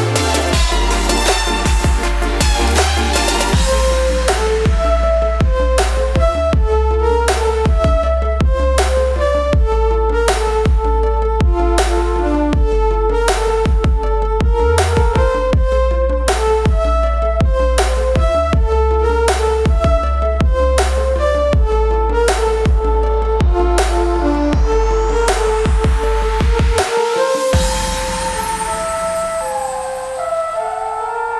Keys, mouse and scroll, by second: 0.5 right click, 1.6 click, 3.1 ctrl+z, 4.6-5.4 scroll down 1, 5.4 click, 7.1 click, 10.4 click, 11.4 ctrl+z, 12.0-15.5 drag, 15.5 right click, 16.5 click, 19.6-24.5 drag, 24.5 v, 24.8-27.7 drag, 27.7 right click, 29.0 click.